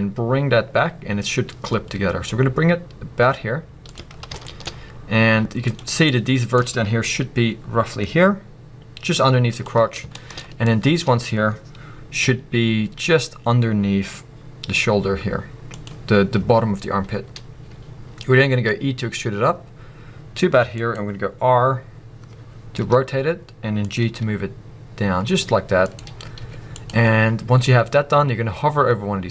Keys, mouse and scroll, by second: 3.9 click, 4.1-4.4 scroll down 2, 4.4 shift+middle drag, 4.7-5.3 scroll up 2, 6.1 click, 6.7-7.1 scroll up 2, 9.6 click, 9.7-10.1 scroll down 2, 10.1-10.6 shift+middle drag, 10.6 click, 11.1-12.2 scroll up 2, 15.8 click, 16.1-18.7 scroll up 1, 20.9 click, 23.9 click, 26.0 click, 26.2 scroll down 1, 27.7-29.3 scroll up 1.